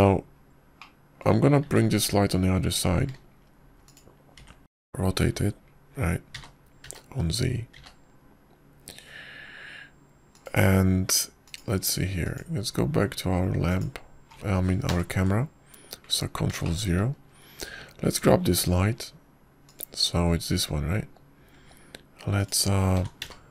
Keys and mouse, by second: 2.7-3.1 middle drag, 3.5 `, 5.0 shift+d, 6.2 r, 13.3 click, 14.1 click, 15.6 click, 16.7 ctrl+KP_0, 18.5 shift+middle drag, 21.5 click, 23.4 g.